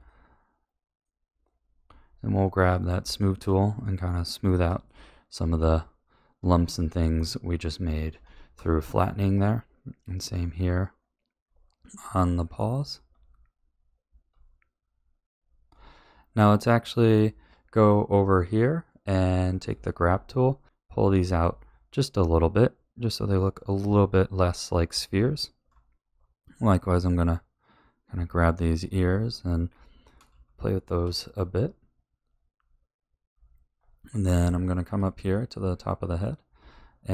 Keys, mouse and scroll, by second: 0.0-2.7 middle drag, 2.7 click, 3.1 shift+middle click, 3.6-4.1 scroll up 2, 4.1-5.5 middle drag, 6.4 click, 7.4 middle click, 8.2 shift+middle click, 8.8 click, 9.3 middle click, 10.3 click, 11.4 middle click, 12.0 click, 13.1 click, 14.2 middle click, 14.8 click, 15.6 middle click, 19.4 click, 20.0 shift+middle click, 20.6 click, 21.3 shift+middle click, 22.7 click, 23.4 click, 24.0 middle click, 25.1 shift+middle click, 25.9 middle click, 27.1 click, 27.8 click, 28.5 middle click, 29.1 shift+middle click, 29.7 shift+click, 30.4 shift+middle click, 31.3 click, 31.6 click, 32.3 click, 32.5 click, 33.7-34.9 middle drag, 35.5 middle click, 36.5 shift+middle click.